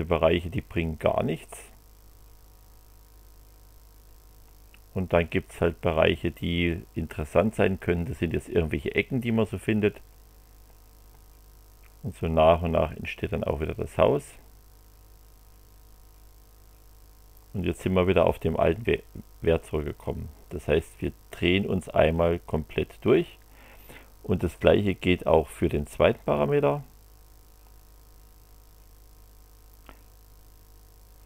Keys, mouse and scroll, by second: 26.3 click.